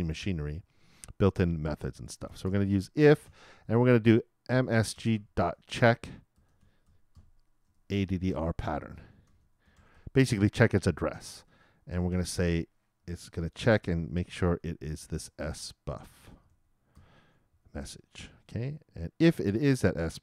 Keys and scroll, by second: 2.8-4.5 typing, 7.4-9.5 typing, 12.1 shift+9, 13.6 shift+', 14.3 shift+/, 17.1-18.2 typing, 19.8 shift+-.